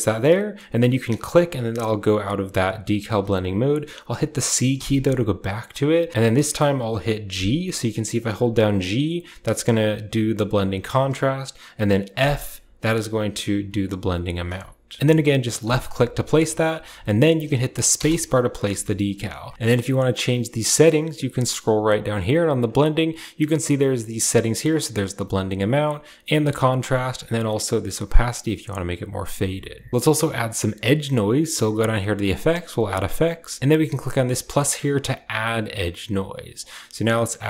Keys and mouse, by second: 17.9-19.5 middle drag, 22.6-23.8 drag, 24.6 click, 25.8 click, 27.1-28.7 drag, 35.1 click, 36.5-37.4 drag.